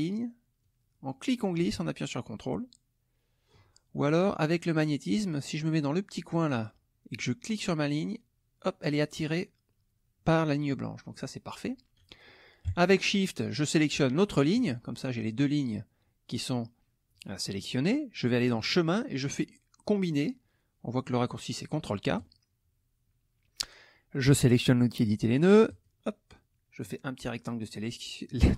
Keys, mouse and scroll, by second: 0.6-3.7 drag, 7.5-9.4 drag, 14.2 shift+click, 18.6 click, 22.1 click, 25.7 click, 26.8 click.